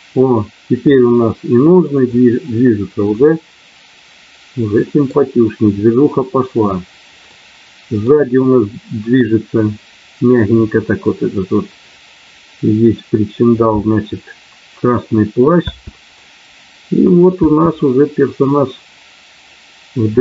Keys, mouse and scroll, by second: 1.0-2.1 middle drag, 3.2-5.1 middle drag, 7.3 middle click, 15.6 space, 16.1-17.4 middle drag, 17.4 space.